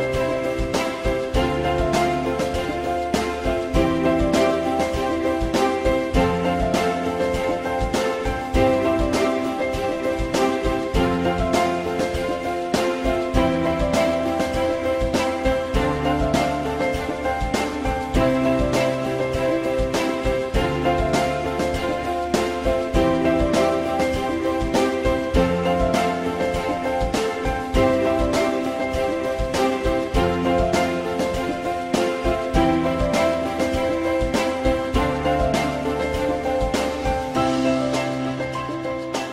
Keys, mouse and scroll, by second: 1.7 ctrl+click, 2.2 ctrl+click, 2.2 f, 3.2 click, 24.5 ctrl+z, 37.4 alt+middle click, 38.8 alt+scroll down 1.